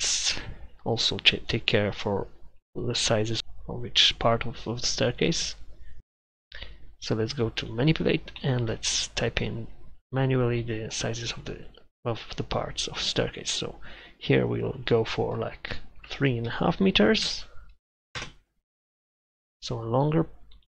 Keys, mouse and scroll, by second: 18.2 Return.